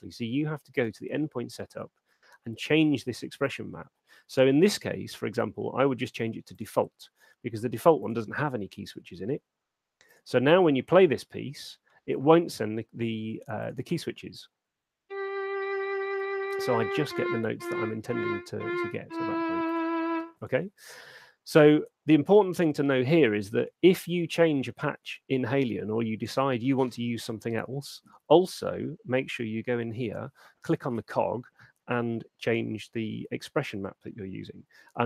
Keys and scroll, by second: 14.3 alt+shift+space, 20.3 space, 28.3 super+4.